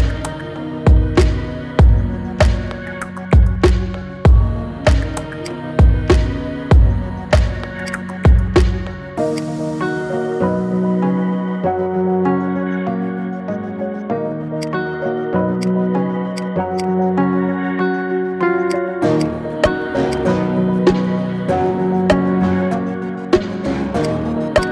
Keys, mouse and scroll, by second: 0.9-3.4 shift+drag, 5.2 click, 5.7 scroll up 2, 6.2-6.6 shift+middle drag, 6.6-7.0 scroll up 2, 7.0-7.6 shift+middle drag, 7.6 click, 9.1-11.7 shift+drag, 12.1-12.6 scroll down 3, 12.6-13.8 middle drag, 13.8-14.4 scroll down 2, 14.4-15.4 right drag, 15.4 click, 16.1 click, 16.5-20.4 right drag, 20.4 scroll up 2, 20.6-21.1 middle drag, 21.1 scroll down 3, 21.4-22.3 middle drag, 22.3 KP_1, 22.9 shift+middle click, 23.4-23.7 scroll up 1, 23.8 click, 24.4 click.